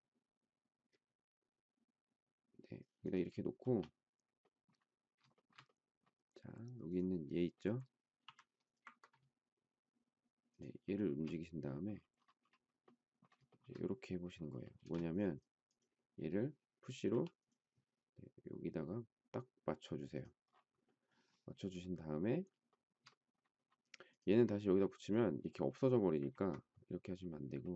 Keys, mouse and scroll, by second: 3.6 space, 5.3 shift+middle click, 8.2 m, 10.5 shift+click, 10.8 shift+middle click, 13.4 shift+middle click, 14.8 space, 17.1 p, 22.7 shift+middle click, 26.2 ctrl+z.